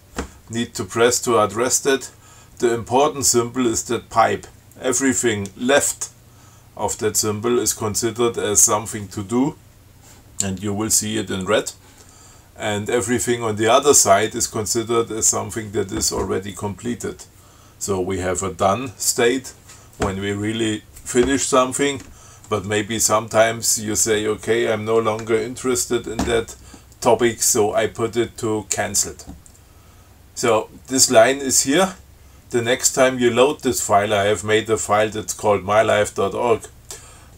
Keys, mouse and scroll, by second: 30.6 click, 31.7 click.